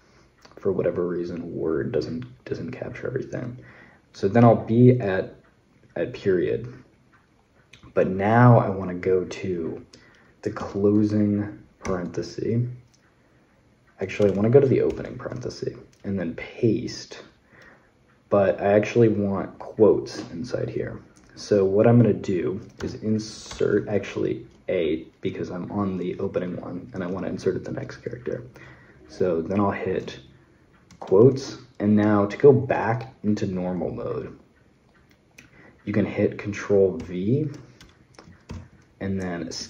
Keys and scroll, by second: 10.4 typing, 11.6 shift+0, 14.0 BackSpace, 14.7 shift+9, 22.6 i, 23.3 BackSpace, 23.4 a, 30.7 shift+', 36.8 v, 37.6 BackSpace, 38.3 ctrl+v, 39.4 Escape.